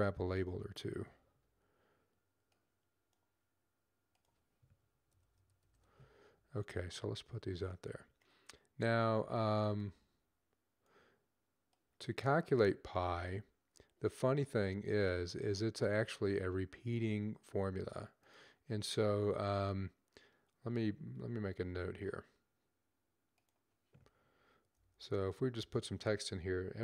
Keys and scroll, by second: 0.0-0.9 typing, 4.7-6.1 typing, 24.6 typing, 26.5-26.8 typing.